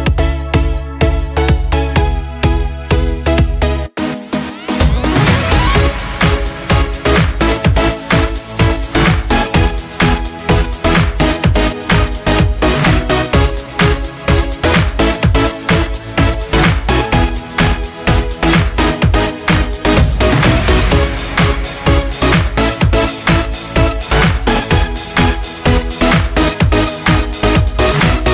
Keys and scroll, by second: 24.6 ctrl+z, 26.3 ctrl+z, 26.4 ctrl+z.